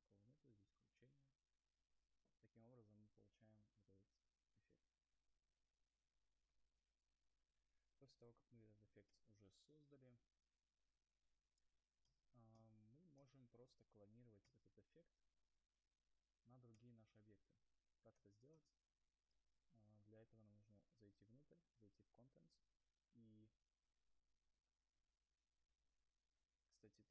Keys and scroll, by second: 13.5 ctrl+z, 14.6 u.